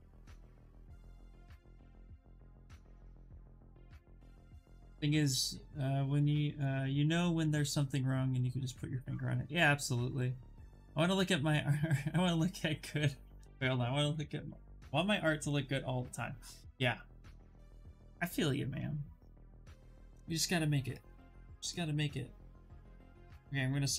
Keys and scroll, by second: 0.9 Return, 22.8 ctrl+d, 23.7 ctrl+z.